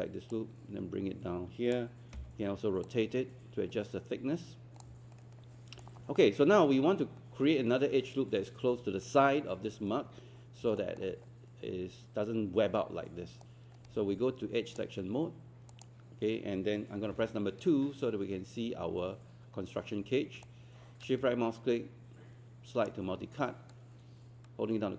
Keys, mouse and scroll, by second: 2.2 e, 2.9-4.9 drag, 5.1-6.7 alt+middle drag, 10.5 scroll up 1, 10.8 alt+middle click, 13.4-15.7 right drag, 15.7 click, 17.1 2, 20.5-23.4 shift+right drag.